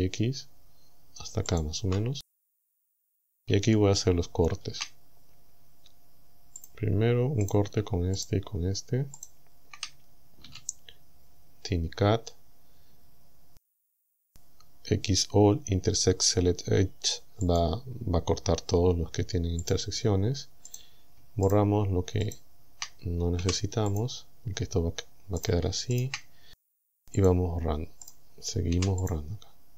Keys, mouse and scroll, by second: 1.5 ctrl+click, 3.7 shift+middle click, 6.6 click, 7.5 right click, 8.2 shift+right click, 9.2 shift+right click, 10.5 w, 17.5 click, 19.7 click, 20.7 right click, 21.5 shift+right click, 22.3 shift+right click, 23.4 Delete, 23.9 click, 25.5 right click, 26.0 shift+right click, 26.7 Delete, 27.2 click, 28.1 right click, 28.8 Delete, 29.1 click.